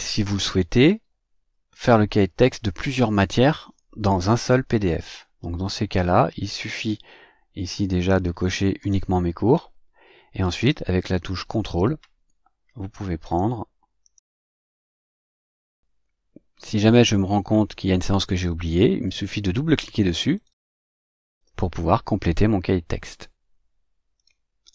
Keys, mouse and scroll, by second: 5.6-6.8 drag, 8.6 click, 13.0 ctrl+click, 13.8 ctrl+click.